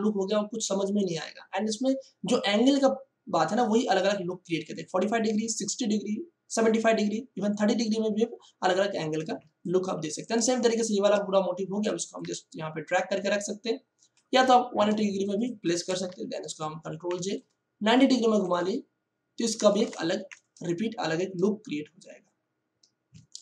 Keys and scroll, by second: 9.3 space, 14.9 space, 16.0 ctrl+e, 17.0 ctrl+j, 17.1 ctrl+t, 19.7 Return, 23.1 ctrl+space.